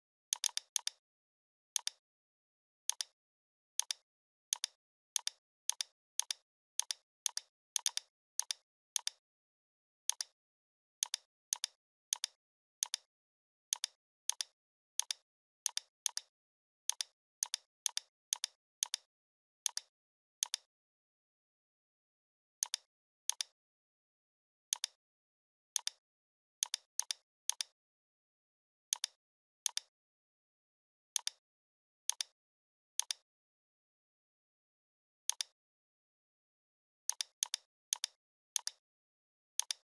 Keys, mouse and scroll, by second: 0.8-1.4 drag, 22.6 click, 23.9 right click, 24.7 click, 31.2 click, 34.3 right click, 35.3 click, 35.9 right click, 37.1 click.